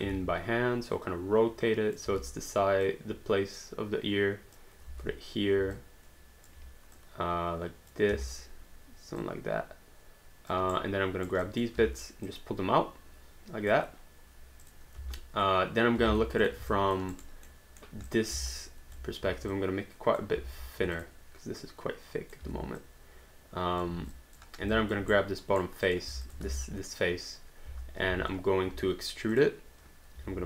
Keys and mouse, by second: 2.1 w, 2.9 click, 4.9 r, 5.7 click, 7.0 click, 8.1 w, 9.2 click, 10.7 right click, 11.4 click, 11.8 w, 12.3 click, 14.6 click, 15.0 space, 16.1 alt+d, 16.4 click, 16.7 alt+click, 17.2 alt+right click, 17.6 alt+middle click, 18.1 click, 18.6 alt+click, 18.9 click, 19.2 r, 19.5 click, 21.0 click, 22.4 w, 22.8 click, 23.9 r, 24.1 click, 24.8 alt+click, 25.2 right click, 25.9 click, 26.3 alt+click, 26.5 space, 27.7 space, 29.3 click, 30.2 w.